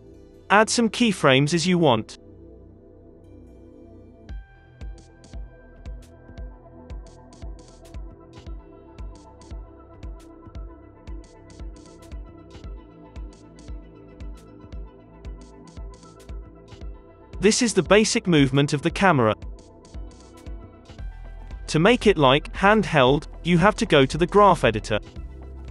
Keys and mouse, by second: 0.5 g, 1.2 click, 1.8 i, 5.1 i, 5.6 click, 6.1 g, 6.2-7.4 drag, 6.9 g, 8.3 i, 8.5 i, 9.0-10.3 drag, 10.0 g, 10.8 g, 11.6 g, 12.3 i, 12.7-14.0 drag, 14.0 r, 15.5 i, 15.9-17.2 drag, 16.4 r, 17.4 i, 17.8 click, 18.4 click, 20.0 n, 20.7-25.4 drag, 22.3 space.